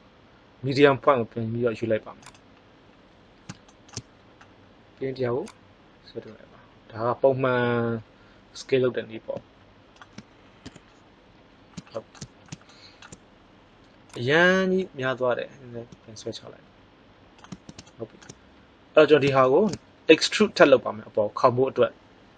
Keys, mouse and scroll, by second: 5.4 click, 10.6 KP_1, 11.6-13.7 middle drag, 14.0-15.8 drag.